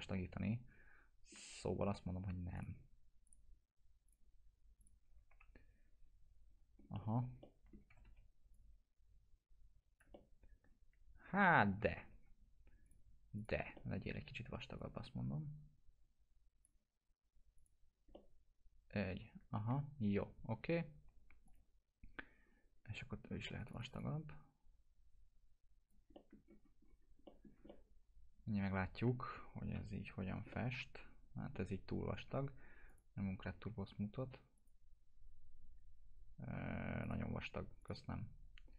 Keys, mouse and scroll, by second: 2.5 click, 5.3 F4, 6.7 scroll up 1, 7.4 alt+middle click, 7.7-8.5 typing, 8.5-10.1 drag, 10.1-11.3 alt+middle drag, 11.8 ctrl+z, 12.8 click, 13.6 click, 13.7 alt+middle click, 14.7-16.6 drag, 18.1-19.7 alt+middle drag, 21.4 click, 26.1 alt+middle click, 26.4 scroll down 1, 27.2 middle click, 27.4 scroll down 1, 27.7-29.2 alt+middle drag, 29.4 scroll down 1, 29.7 p, 30.5-31.7 alt+middle drag, 32.9 click, 33.1 t, 34.5 click, 35.5 scroll up 1, 37.0 click.